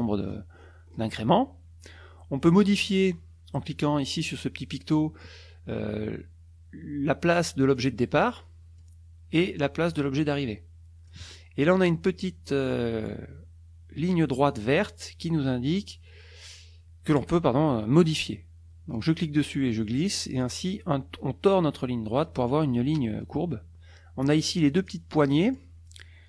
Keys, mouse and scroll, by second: 4.7 click, 7.8-9.0 drag, 9.9-11.3 drag, 19.0-20.6 drag, 24.9 click.